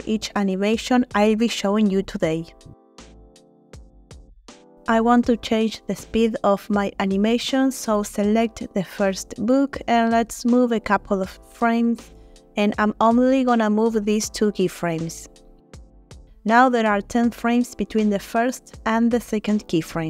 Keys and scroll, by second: 0.3 1, 10.7 Right, 10.9 Right, 11.1 Right, 11.5 Right, 12.2 Right, 15.0 g.